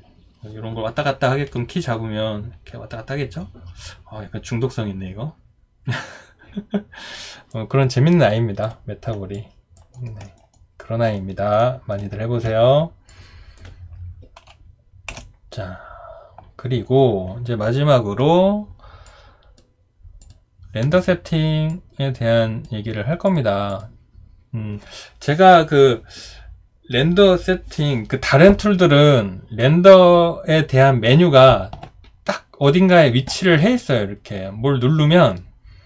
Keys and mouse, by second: 9.3 alt+click, 9.9 alt+right click, 10.3 alt+middle click, 10.5 alt+right click, 11.6 alt+middle click, 15.1 Delete.